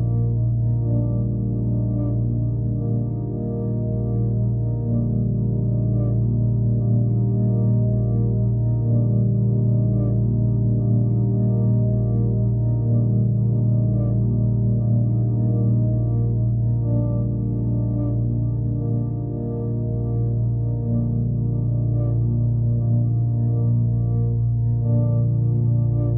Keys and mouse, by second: 3.8-4.9 drag, 6.8 click, 8.0-9.8 drag, 10.2-13.3 drag, 15.2-16.1 drag, 16.6-16.9 alt+drag, 17.8-18.7 drag, 19.6 ctrl+c, 20.3-21.1 drag, 21.5 ctrl+v, 22.2 click, 23.3-24.3 drag, 24.6 click, 25.8-26.1 drag.